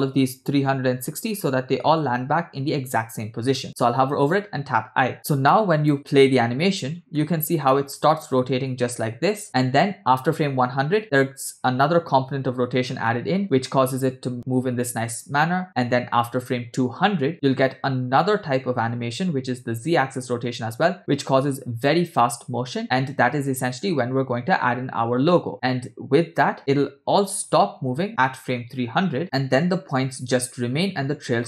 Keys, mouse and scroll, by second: 4.2 i, 5.1-5.5 scroll down 2, 5.8 click, 6.1 space, 6.9-8.5 scroll down 2, 7.2-9.5 middle drag.